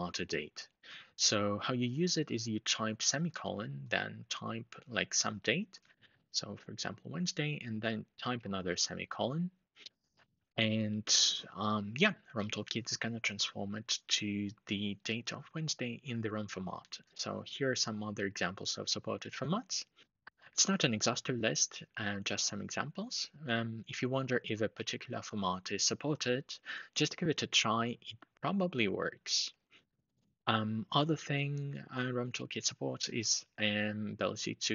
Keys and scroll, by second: 2.5 typing, 5.4-6.5 typing, 8.2 typing.